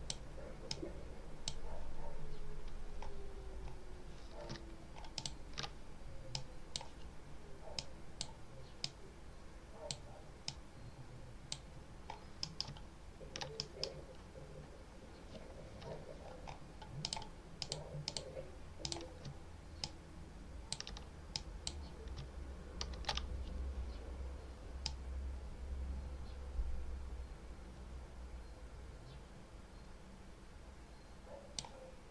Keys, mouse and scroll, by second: 0.6 click, 3.2 scroll up 1, 5.1 ctrl+alt+click, 6.2-6.8 drag, 7.7 click, 8.7 click, 10.3 click, 12.3 middle click, 12.5 ctrl+click, 12.7 ctrl+scroll down 2, 13.5 ctrl+middle click, 16.1-16.6 scroll up 1, 16.9 click, 17.5 click, 17.9 click, 18.7 click, 19.7-20.8 ctrl+drag, 21.2 click, 22.8 ctrl+z, 24.7-31.7 drag, 32.0 click.